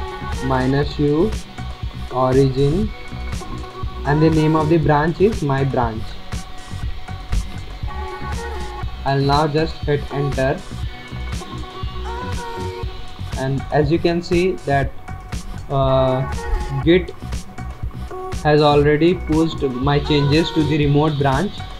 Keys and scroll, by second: 0.0-3.7 typing, 5.5-7.6 typing, 10.6 Return, 10.6 typing.